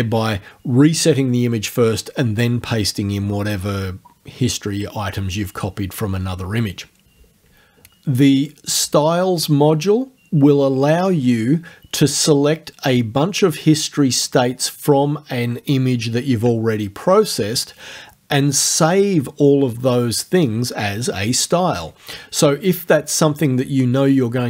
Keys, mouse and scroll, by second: 8.4 click.